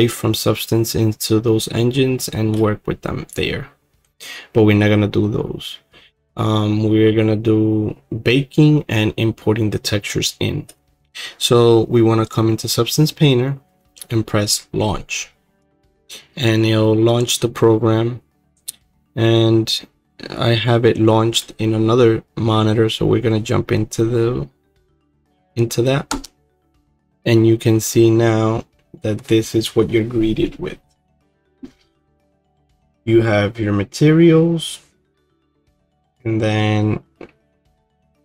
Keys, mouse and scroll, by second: 3.3 click, 12.3 click.